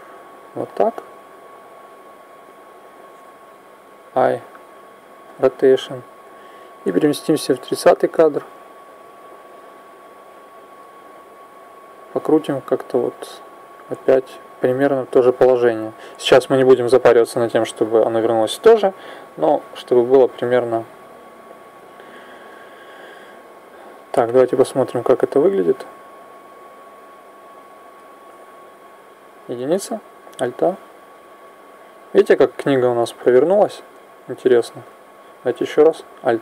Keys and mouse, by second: 6.8 click, 11.6-13.5 drag, 24.1-26.1 drag, 29.1 KP_1, 30.1 alt+a, 34.6 Escape, 35.8 alt+a.